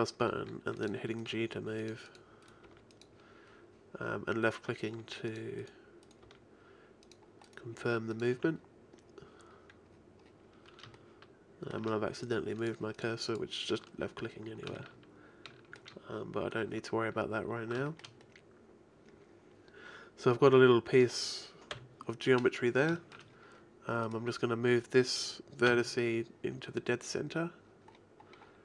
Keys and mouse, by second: 0.3 g, 1.6 g, 2.6 g, 5.0 g, 6.2 g, 7.8 g, 8.4 a, 12.6-16.5 drag, 21.8 KP_1, 25.7 n, 28.1-28.6 middle drag.